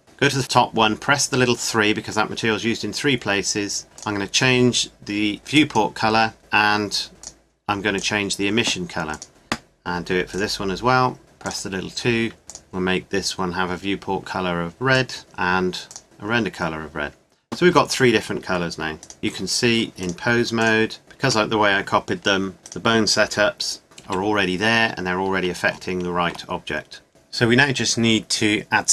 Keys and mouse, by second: 1.6-3.6 drag, 4.0-5.4 drag, 7.2-9.3 drag, 10.3-14.4 drag, 15.2 click, 19.0 right click, 19.2 r, 21.0 middle click, 21.2 r, 22.6 click, 24.0 right click, 24.0 r, 24.7-27.1 middle drag, 27.1 Tab.